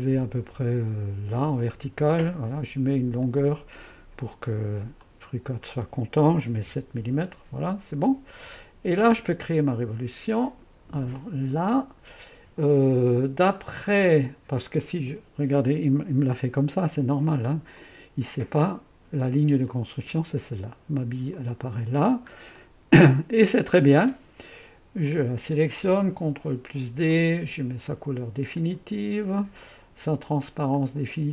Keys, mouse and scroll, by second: 1.6 click, 2.1-3.2 middle drag, 3.2-6.2 drag, 6.6 7, 7.0 Return, 8.9-13.1 drag, 15.1 2, 17.8-20.6 drag, 21.3 click, 22.1 middle click, 22.6-24.7 drag, 25.1 click, 26.0 typing, 26.2 ctrl+d, 27.2-29.8 drag, 30.3-31.3 drag.